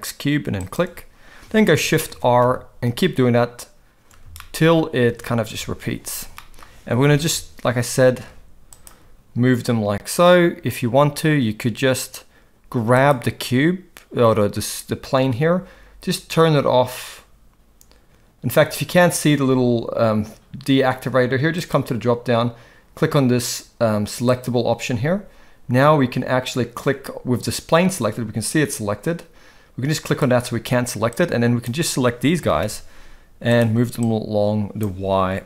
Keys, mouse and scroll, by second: 1.7 shift+r, 2.1 shift+r, 2.4 shift+r, 2.9 shift+r, 4.4 shift+middle drag, 5.1 shift+r, 5.5 shift+r, 6.5 shift+middle click, 7.1 g, 13.0 click, 21.5-25.0 drag, 27.4 click, 30.1 click, 31.1-31.6 drag, 32.3 g, 34.1-34.8 drag, 35.1 g.